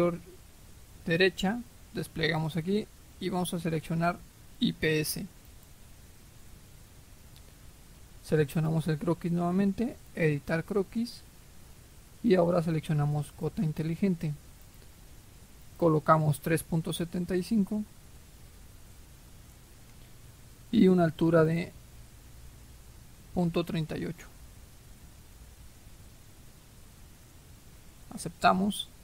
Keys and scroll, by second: 17.4-18.4 typing, 18.8 Return, 25.0-27.6 typing, 27.9 Return.